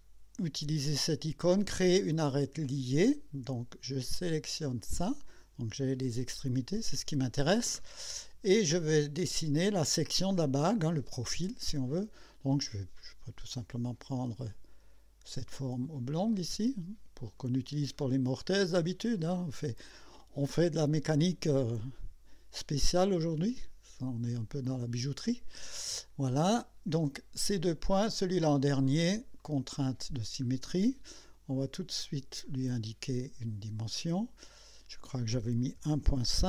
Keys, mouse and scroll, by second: 3.0 click, 4.8 click, 13.0 click, 15.6 click, 17.4 click, 17.9 right click, 20.7 click, 23.5 click, 24.9 click, 29.4 click, 30.4 scroll up 2, 32.4 click, 34.5 click, 35.8 KP_1, 36.0 KP_Decimal, 36.3 KP_5.